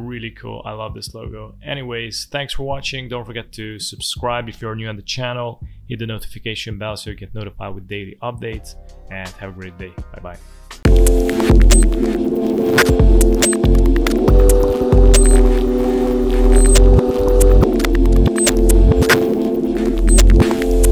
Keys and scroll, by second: 0.4 v, 0.9 space.